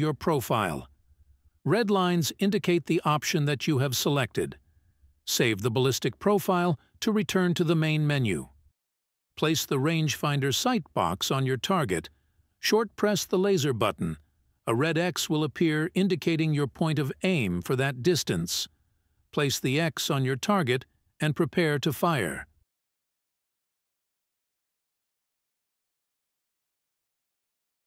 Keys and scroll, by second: 4.2 Menu.